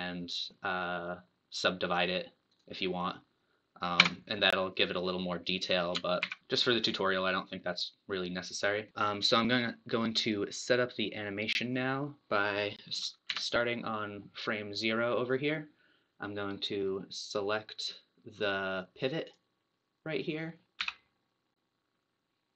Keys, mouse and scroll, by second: 4.1 Tab, 6.2 ctrl+z, 6.4 Tab, 6.8 scroll up 3, 7.4-9.0 middle drag, 9.0-9.8 scroll up 1, 10.9-13.3 drag, 13.3 Left, 19.2 click, 20.6 t, 20.8 n.